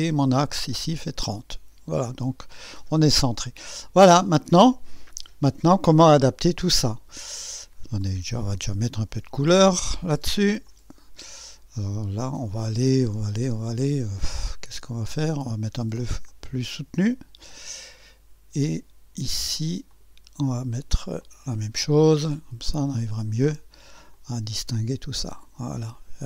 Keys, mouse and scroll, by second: 5.5 scroll down 2, 6.0-7.5 drag, 8.0 click, 9.0 ctrl+d, 10.6 click, 16.3 click, 17.5 click, 19.9 click, 21.2 click, 23.0 click, 24.2 click, 25.9 click.